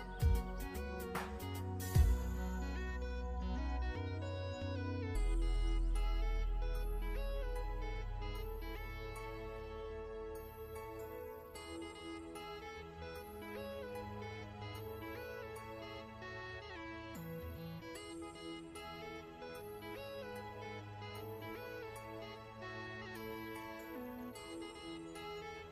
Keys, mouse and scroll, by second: 15.4 alt+Num_Lock, 15.5 scroll up 1, 16.0 click, 16.2-17.4 ctrl+scroll up 2, 17.4 i, 17.5 click, 17.9 v, 18.1 click, 18.4 ctrl+scroll up 2, 19.1 click, 23.2-24.5 scroll up 1.